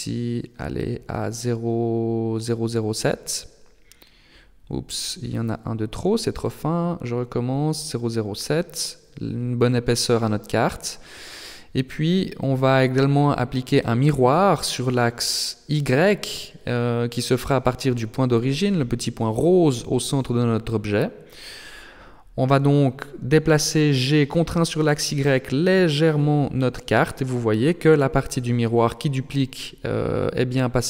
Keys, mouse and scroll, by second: 2.5 click, 4.6 KP_0, 6.9 click, 11.7 KP_3, 14.4 Tab, 16.9 click, 18.5 click, 20.6 click, 21.2 click, 23.0 g, 28.2 middle click, 29.0-30.2 scroll down 1, 30.2-30.8 scroll down 2, 30.2 g.